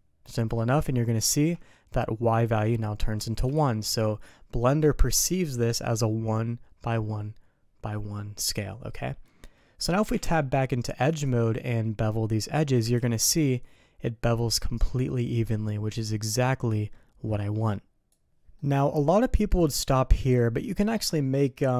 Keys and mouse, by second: 1.3 ctrl+z, 3.5 ctrl+shift+z, 4.7 click, 9.0 middle click, 10.1 Tab, 12.9 ctrl+b, 18.5 middle click.